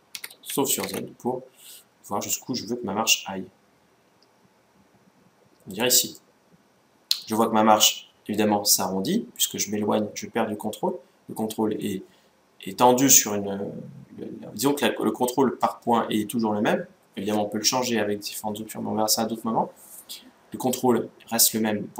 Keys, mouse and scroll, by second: 5.9-7.6 middle drag.